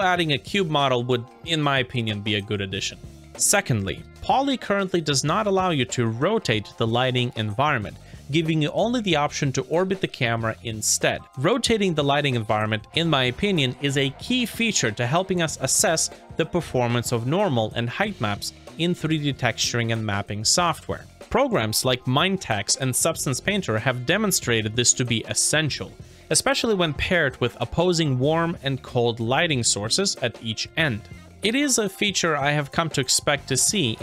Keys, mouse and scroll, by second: 11.2 scroll down 1, 11.4 shift+right click.